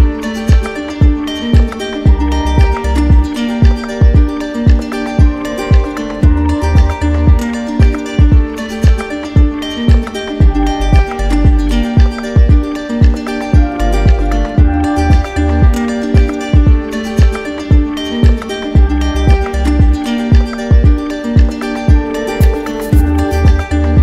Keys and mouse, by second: 1.2 shift+right click, 2.2 click, 4.8 right click, 5.6 alt+right click, 6.8 right click, 9.6 right click, 10.6 click, 11.8 click, 12.5 alt+click, 13.3 click, 17.7 click, 21.8 click.